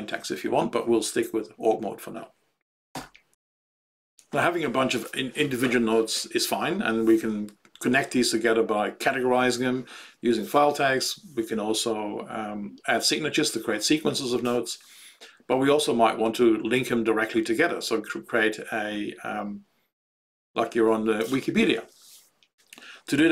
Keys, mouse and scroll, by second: 2.8 Return, 3.2 q.